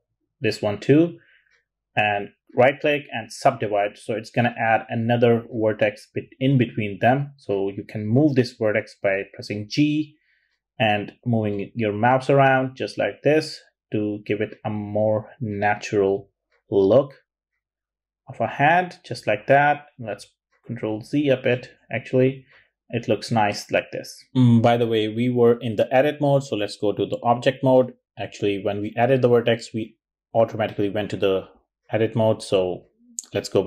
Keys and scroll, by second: 6.8 g, 10.6 g, 14.6 g, 16.2 g, 17.8 super+z, 18.2 super+z, 18.6 super+z, 19.0 super+z.